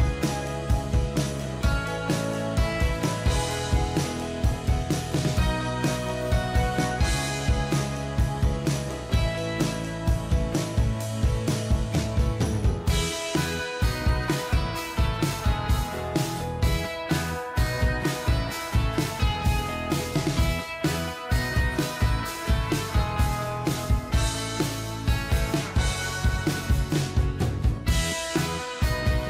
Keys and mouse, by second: 3.6 click, 5.6 ctrl+click, 12.5 ctrl+click, 17.3 Right, 18.0 Right, 18.4 Right, 18.6 Right, 18.8 Right, 19.0 Right, 22.7 double click.